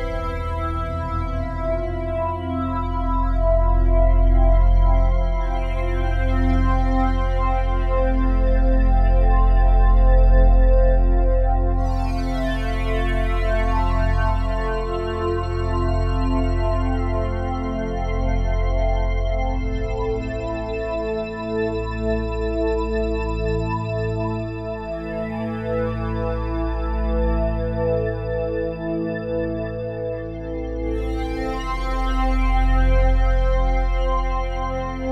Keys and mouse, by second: 0.1-1.9 drag, 0.7 space, 1.9 space, 2.3-3.8 drag, 2.3 space, 2.7 space, 3.8 space, 4.6-7.2 drag, 9.5 click, 10.4 click, 11.0 click, 12.8 click, 13.4-17.3 drag, 17.3 ctrl+s, 18.8 0, 19.8 ctrl+alt+click, 21.8 click, 22.8 click, 24.9-25.4 drag, 25.6-35.1 drag.